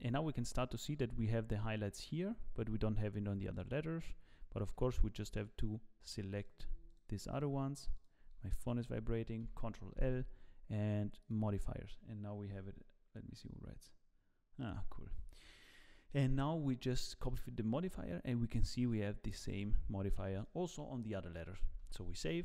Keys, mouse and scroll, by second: 2.0-2.5 scroll up 2, 3.6 click, 4.7 z, 5.3 shift+click, 6.0 shift+click, 6.5 shift+click, 8.3 shift+click, 9.4 ctrl+l, 16.9-17.8 scroll up 10, 19.3 scroll down 8, 20.3-20.8 scroll down 2, 20.4 shift+middle click, 21.9 ctrl+s, 22.2-22.4 scroll down 3.